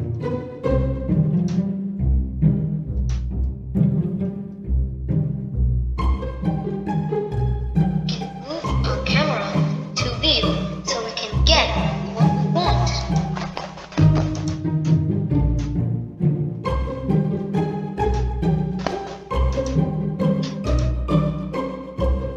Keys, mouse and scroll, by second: 1.9 shift+click, 3.2 shift+click, 4.8 shift+click, 5.4-9.4 middle drag, 10.1 click, 11.0-14.0 middle drag, 14.0 click, 14.9 shift+click, 16.2 shift+click, 16.8-18.6 middle drag, 19.9 click, 21.4 shift+click.